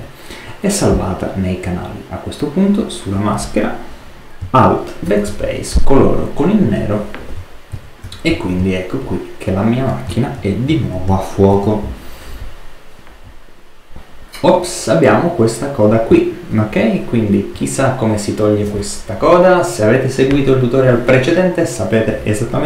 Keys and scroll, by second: 5.0 alt+BackSpace, 8.5 super+space, 10.3 super+-, 11.4 super+d.